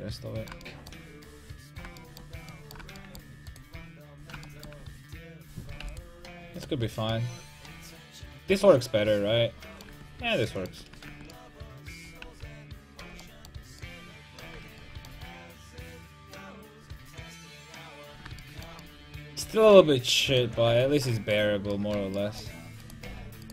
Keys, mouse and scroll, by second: 0.1 click, 1.8 middle click, 2.2-3.5 middle drag, 3.5-7.1 right drag, 5.8 x, 6.7 Tab, 9.9 Tab, 10.8 Tab, 11.1 Tab, 12.2 a, 13.0 a, 14.5 Tab, 15.7 alt+h, 19.5 Tab, 20.7 Tab, 22.8-23.5 right drag, 23.1 g.